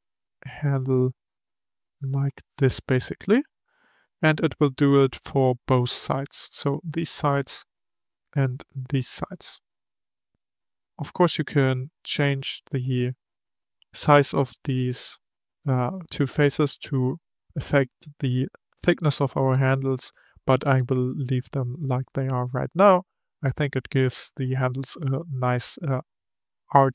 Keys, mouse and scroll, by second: 3.7-6.7 middle drag, 7.5-13.5 middle drag, 13.8-16.8 middle drag, 22.0-25.1 middle drag.